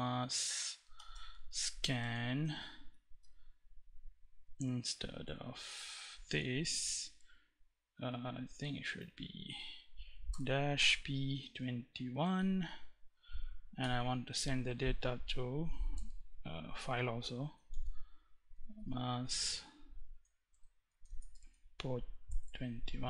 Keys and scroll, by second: 0.0-1.3 typing, 2.0 Right, 2.5 BackSpace, 6.2 Left, 7.2 Right, 9.6-11.5 typing, 13.1 shift+., 15.2 space, 17.0-23.0 typing.